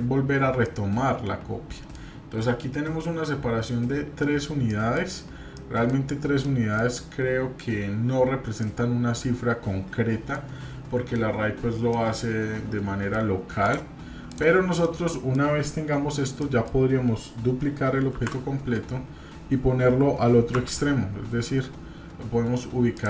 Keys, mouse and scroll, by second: 0.2-0.6 scroll down 2, 0.6-1.9 middle drag, 4.7 middle click, 5.5 middle click, 6.2 scroll up 1, 6.3 shift+middle click, 8.6-10.3 middle drag, 11.9-13.2 middle drag, 13.6 drag, 14.3 click, 14.8-15.4 middle drag, 16.0 scroll down 1, 16.4 middle click, 18.1 shift+d.